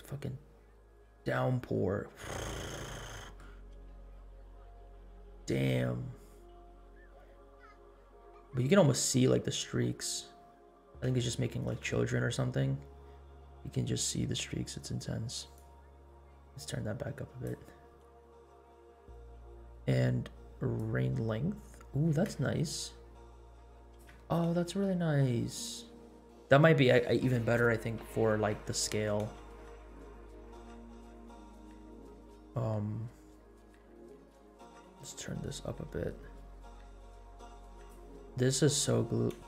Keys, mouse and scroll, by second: 0.9 scroll down 1, 1.7 scroll up 2, 2.7 scroll up 2, 3.1 middle click, 3.6 scroll up 2, 3.8 middle click, 4.4 scroll down 1, 4.5 scroll up 2, 4.8 middle click, 7.4 middle click, 8.1 scroll down 2, 8.9 scroll up 2, 11.0 space, 11.8 space, 13.3 space, 15.5-17.7 drag, 17.9 scroll down 1, 18.2 space, 19.7 space, 20.7-24.1 drag, 24.3 scroll up 2, 24.7 space, 25.7 scroll down 2, 29.2 space, 34.1-38.0 drag, 38.3-39.0 scroll up 3, 39.0 scroll down 1.